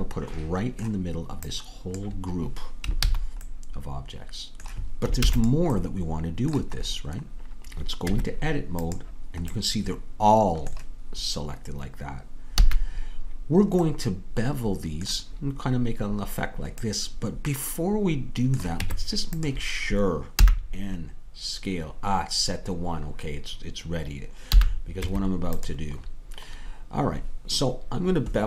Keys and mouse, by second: 3.1 ctrl+z, 5.3 ctrl+s, 8.2 Tab, 12.7 a, 13.9-15.6 middle drag, 18.9 Tab, 20.4 n, 24.6 n, 25.1 Tab.